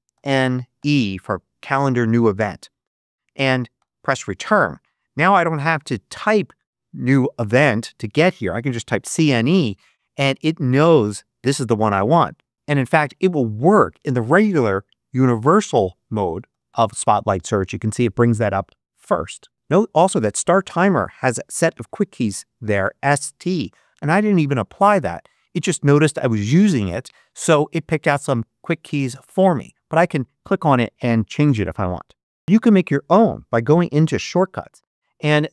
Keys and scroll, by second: 0.0 n, 0.7 e, 3.7 Return, 8.5-9.5 typing, 12.9 Escape, 16.1-17.1 typing.